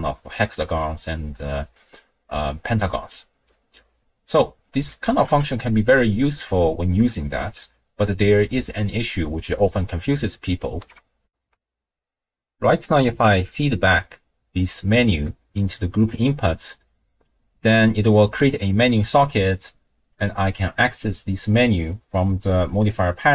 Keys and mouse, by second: 3.1-4.5 drag, 4.9 click, 5.2 x, 5.7 click, 5.7 middle click, 11.3 ctrl+alt+shift+w, 11.3 ctrl+alt+shift+q, 15.2-16.5 drag, 20.1 click, 21.5-23.3 drag.